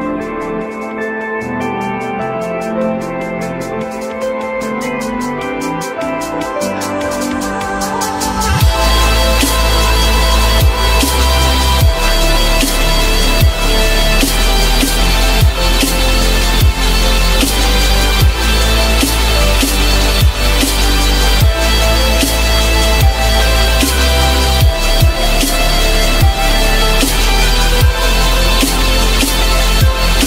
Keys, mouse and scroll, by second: 4.2 alt+middle click, 6.6 s, 10.5 alt+middle click, 12.0-12.6 alt+scroll up 1, 12.9 s, 14.2 ctrl+click, 15.8 alt+middle click, 17.0 alt+middle click, 23.4 ctrl+click, 24.3 ctrl+click, 25.1 alt+middle click, 26.8 alt+middle click, 27.5 alt+middle click, 28.2-28.6 alt+scroll up 1.